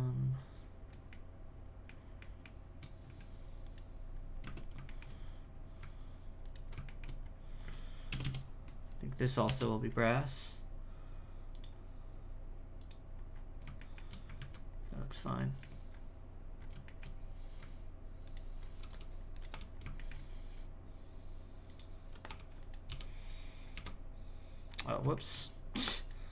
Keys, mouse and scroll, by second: 0.5-1.1 scroll up 1, 1.1-3.0 shift+middle drag, 3.0 z, 3.6 right click, 4.1-4.4 scroll up 2, 4.4 Tab, 4.9 shift+middle click, 5.2-6.4 scroll up 1, 6.4 alt+right click, 6.8 shift+middle click, 7.2-8.1 scroll up 1, 8.1 ctrl+KP_Add, 8.2 ctrl+KP_Add, 11.5 click, 12.8 click, 13.3-13.8 scroll up 4, 13.8 shift+middle click, 14.4 alt+a, 14.8-15.4 scroll down 7, 15.4 shift+middle click, 15.9-16.6 scroll up 2, 16.6 scroll up 2, 16.9 shift+middle click, 17.3-18.2 scroll up 1, 18.2 alt+right click, 18.9 g, 20.0-21.6 shift+middle drag, 21.6 click, 22.3 h, 22.6 right click, 23.1-23.7 scroll down 3, 23.7 alt+h, 24.7-25.1 scroll up 3, 25.1 shift+middle click, 26.0 right click.